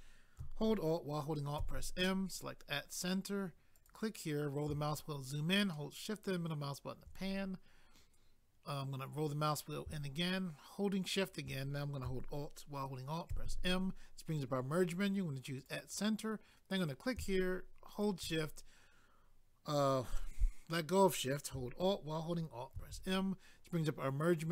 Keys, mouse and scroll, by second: 1.6 alt+m, 2.3 click, 2.4 click, 3.7 click, 3.9 click, 4.2 scroll up 1, 5.7 shift+middle click, 9.0 scroll up 1, 11.0 shift+click, 13.3 alt+m, 15.5 click, 16.8 click, 16.9 click, 17.9 shift+click, 18.0 shift+click, 22.8 alt+m.